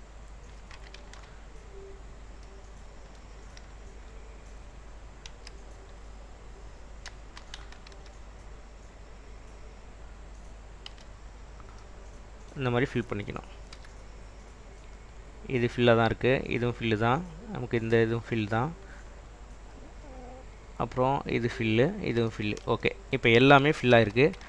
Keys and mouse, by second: 1.1 ctrl+b, 2.1 click, 5.4 f, 8.0 ctrl+b, 11.0 Tab, 13.9 /, 15.2 click, 24.1 ctrl+s.